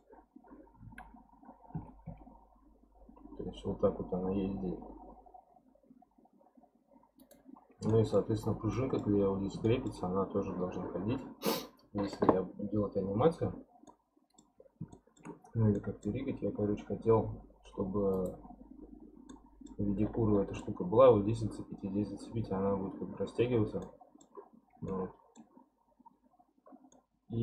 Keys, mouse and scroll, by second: 0.7-1.7 scroll up 2, 1.7 r, 7.9-8.3 shift+middle drag, 8.3-8.7 scroll up 2, 8.7-9.2 middle drag, 9.2-9.7 scroll up 4, 9.7-12.8 shift+middle drag, 13.9-14.6 middle drag, 14.6-14.9 scroll down 5, 14.9-16.2 shift+middle drag, 16.2-18.1 scroll up 11, 18.1 click, 18.8 scroll up 2, 19.3-20.0 middle drag, 20.0-22.6 scroll down 16, 23.8-24.5 middle drag, 24.5-24.9 scroll up 6, 24.9-26.7 shift+middle drag, 26.7 scroll down 3, 26.9-27.4 middle drag.